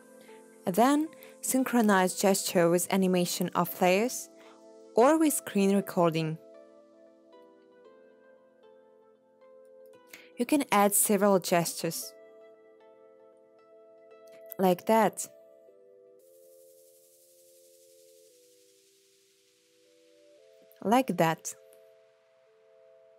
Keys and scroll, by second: 2.0 0, 15.5 alt+].